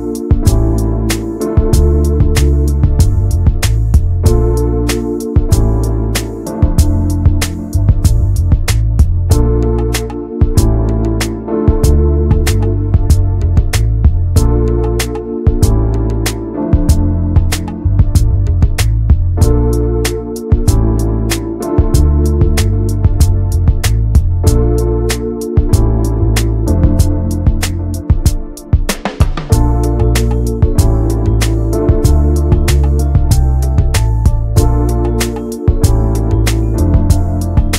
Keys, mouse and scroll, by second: 1.7 middle click, 2.6 click, 3.2 scroll up 1, 3.5-5.3 shift+middle drag, 5.3-25.0 drag, 25.8 click, 26.5-26.8 scroll down 2, 26.8-29.2 middle drag, 29.7 click, 30.2 middle click, 31.0 scroll up 2, 31.3 middle click, 32.2 click, 32.7 Tab, 33.1 Tab, 35.6 click, 35.8-37.3 middle drag, 37.3-37.7 drag.